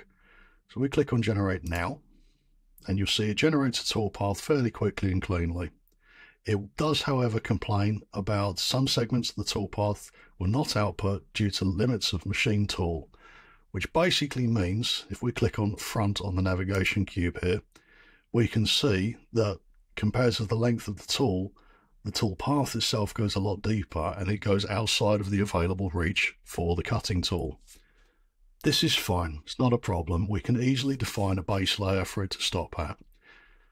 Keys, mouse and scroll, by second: 1.7 click, 6.0 click, 6.2 click, 6.4 click, 16.8 click, 17.6-18.4 drag, 18.4-21.8 scroll, 21.8 scroll.